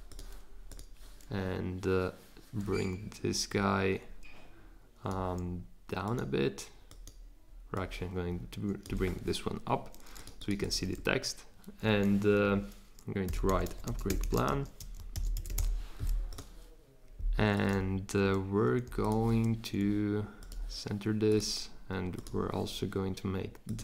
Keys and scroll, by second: 13.0-16.0 typing.